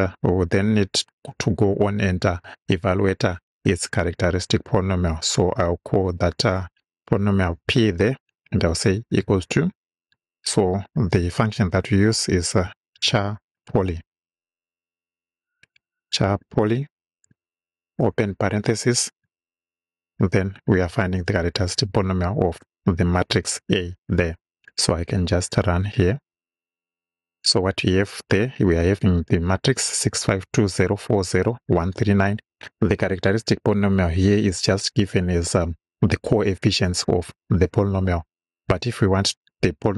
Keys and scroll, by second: 4.8 Return, 7.7 shift+p, 9.2 =, 12.0-16.0 typing, 17.8 shift+9, 21.1 shift+a, 22.7 Right.